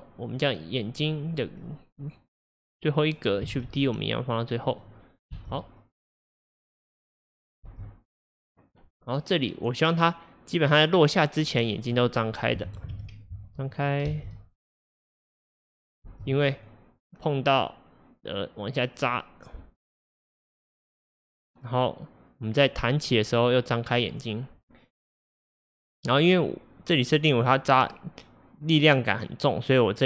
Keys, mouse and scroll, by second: 1.7-3.6 drag, 3.6 shift+d, 5.4 space, 7.7 space, 8.4-11.5 drag, 12.0-13.0 drag, 13.0 shift+d, 14.1 space, 16.1 space, 16.7-19.7 drag.